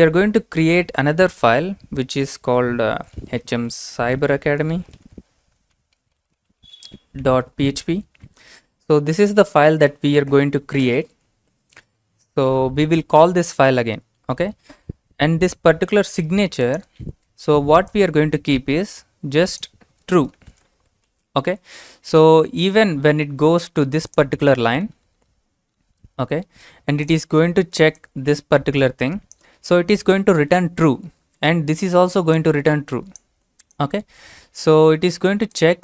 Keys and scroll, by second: 2.7-8.3 typing, 20.3-21.6 typing.